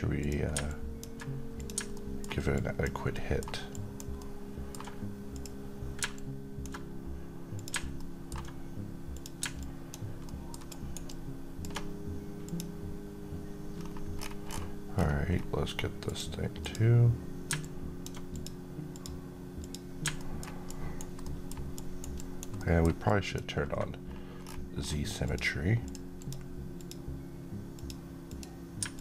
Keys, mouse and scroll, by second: 0.1 click, 1.8 middle click, 2.4 alt+click, 3.0 alt+middle click, 3.6 alt+click, 4.1-4.7 alt+middle click, 5.2-7.4 drag, 7.9 middle click, 9.0 click, 10.1 alt+middle click, 10.5 alt+right click, 11.0-11.6 alt+drag, 13.7-14.0 scroll up 1, 14.0-15.9 scroll down 1, 15.9 click, 20.1 alt+middle click, 20.5 alt+right click, 21.1 alt+middle click, 21.6 alt+right click, 22.0 alt+click, 22.4 alt+middle click, 22.9 alt+click, 24.3-24.6 scroll down 1, 25.1-29.0 drag.